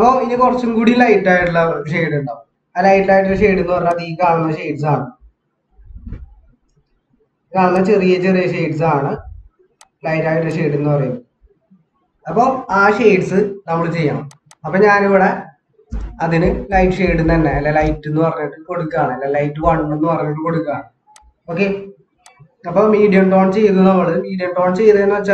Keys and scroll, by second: 15.9-18.0 typing, 19.6 typing.